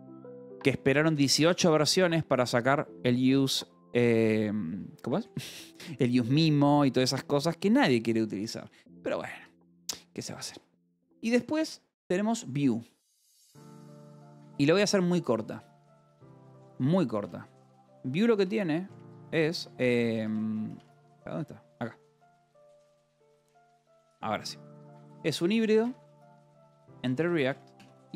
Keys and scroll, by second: 0.0-1.4 typing, 1.8 Escape, 4.0 j, 5.1 k, 5.7 k, 6.4 j, 7.4 o, 8.2 Return, 13.3-14.7 typing, 15.4 Return, 17.0 :, 18.3 space, 18.8 BackSpace, 19.9-23.2 typing, 21.0 Escape, 23.3 Escape, 24.3-28.1 typing.